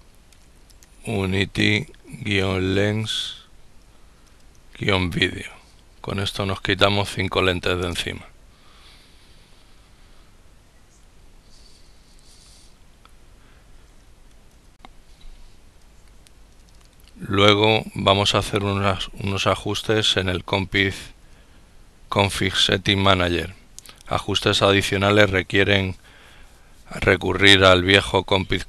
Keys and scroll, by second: 0.1 ctrl+u, 0.3 ctrl+n, 1.0 ctrl+t, 1.4 ctrl+y, 2.2 ctrl+l, 2.3 ctrl+e, 2.6 ctrl+n, 3.1 ctrl+s, 3.9 ctrl+-, 4.6 ctrl+v, 4.8 ctrl+i, 4.9 ctrl+d, 5.3 ctrl+e, 5.4 ctrl+d, 7.5 ctrl+Return, 14.2 ctrl+l.